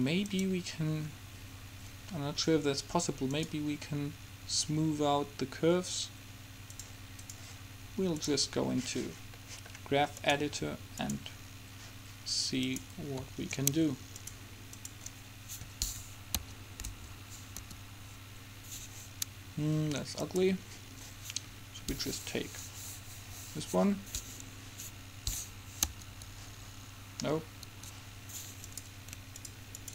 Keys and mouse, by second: 8.4-10.1 drag, 10.1 middle click, 10.4-12.1 drag, 12.8-16.9 drag, 17.8 Home, 20.3 click, 21.2 click, 22.1 click, 26.0 Home, 28.8-29.9 drag.